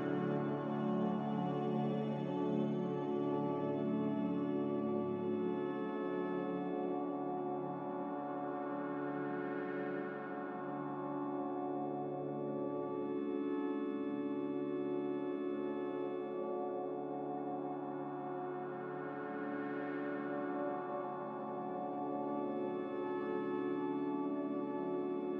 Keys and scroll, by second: 7.1 0.